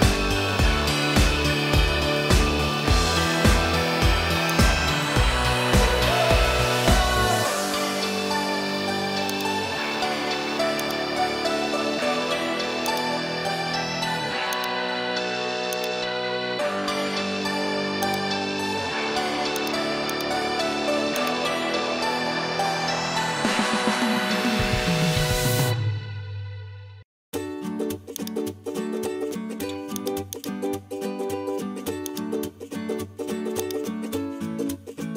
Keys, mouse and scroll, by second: 3.0-4.0 middle drag, 4.6-9.4 drag, 10.4 Tab, 14.5 click, 15.7 click, 17.5 Tab, 20.1 shift+click, 21.2-28.3 drag, 30.0 click.